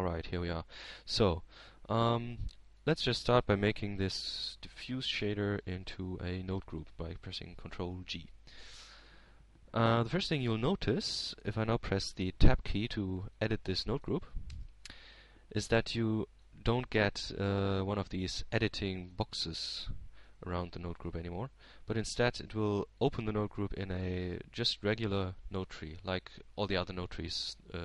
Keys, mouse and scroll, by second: 1.6 click, 2.7 click, 3.3-3.9 scroll up 1, 3.9 click, 4.8-5.4 scroll up 1, 5.6-6.9 drag, 8.1-9.2 drag, 10.2 ctrl+g, 12.8-14.2 drag, 17.0-18.1 drag, 18.2 Tab, 19.5-20.6 middle drag, 22.4 middle click, 22.9 a, 23.9 g, 24.8 click, 25.4-27.1 middle drag.